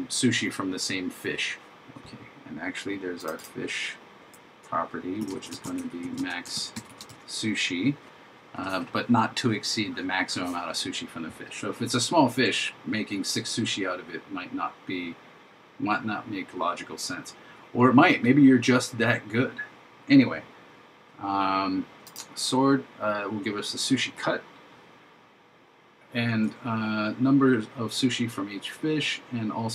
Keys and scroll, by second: 5.7 shift+m, 6.6 shift+s.